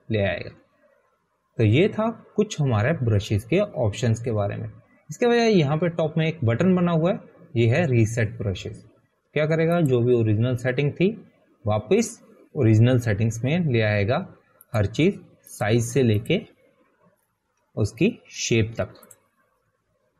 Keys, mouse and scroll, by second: 1.9 click, 14.3 click, 16.4 click, 19.3 click.